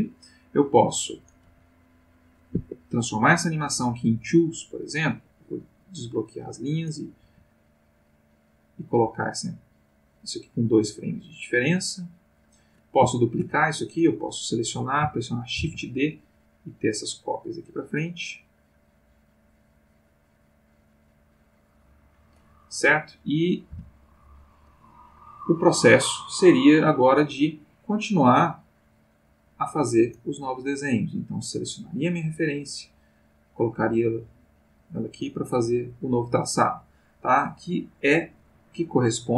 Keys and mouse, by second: 1.2 click, 1.4 g, 2.6 Escape, 5.3 click, 6.7 click, 7.2 g, 8.1 click, 8.6-13.0 drag, 13.2 shift+click, 15.6 shift+d, 16.8 click, 17.4-22.5 drag, 22.9-23.6 drag, 23.6 x, 24.1 click, 24.9 click, 27.9 click, 29.4 click, 31.6 click, 32.9-35.6 drag, 38.6 click.